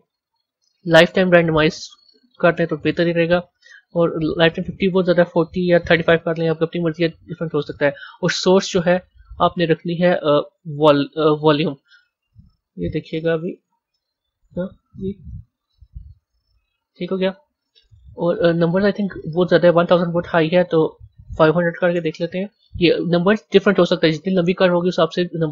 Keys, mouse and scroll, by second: 1.6-7.1 drag, 8.1 click, 8.4-9.3 scroll down 3, 9.3-12.3 drag, 13.1 z, 15.3-16.4 drag, 17.2-18.5 drag, 18.5-18.9 scroll up 9, 19.8-21.4 drag, 21.4 KP_0.